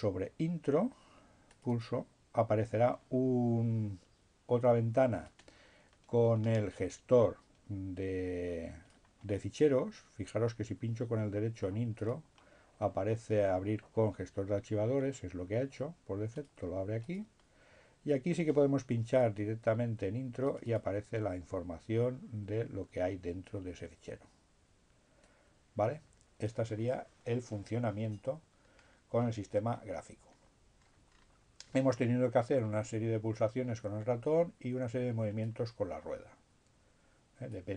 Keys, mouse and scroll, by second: 0.4-2.5 drag, 3.7-9.6 drag, 9.6 middle click, 11.8 right click, 16.0 click, 17.1 click, 20.3-21.4 drag, 25.1-27.1 drag, 28.7-29.3 scroll down 1, 29.3-30.5 scroll up 1, 30.5-31.3 scroll down 2, 31.3-31.9 scroll up 2, 34.1-37.7 drag.